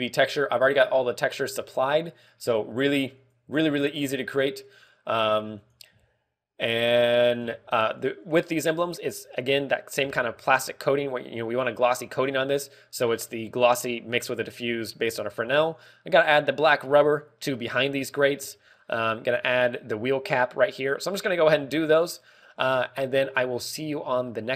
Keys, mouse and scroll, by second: 9.0 click, 10.5 shift+middle click, 11.0 scroll up 2, 12.0 scroll up 1, 19.1 scroll down 4, 19.4 shift+middle click, 19.8-20.7 scroll up 5, 20.3 shift+middle click, 21.6-22.1 scroll down 4, 22.1 shift+middle click, 22.4 scroll down 3, 22.7 shift+middle click, 23.3-23.9 scroll up 2, 23.7 shift+middle click, 24.3 scroll down 1.